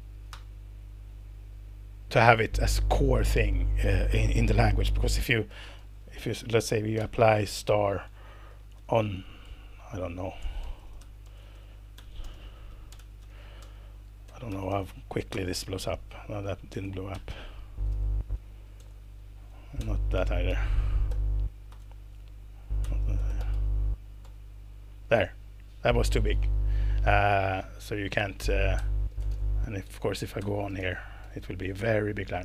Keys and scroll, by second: 0.3 Return, 5.2-8.7 typing, 8.5 alt+8, 10.3-15.2 typing, 15.3 alt+Return, 16.4-18.4 typing, 18.7 alt+Return, 19.8-21.4 typing, 21.7 alt+Return, 22.8-24.0 typing, 24.2 alt+Return, 28.8-31.5 typing.